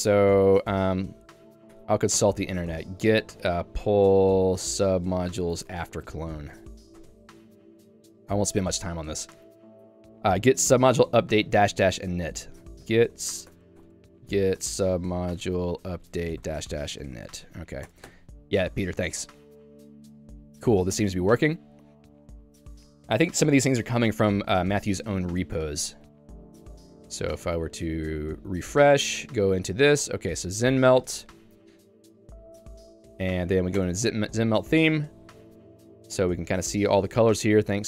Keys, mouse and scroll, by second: 18.2 Return, 24.7 Escape, 25.8 super+e, 27.9-31.0 typing, 33.3 j, 33.5 j, 34.0 Return, 35.2 ctrl+d, 35.5-37.8 ctrl+d.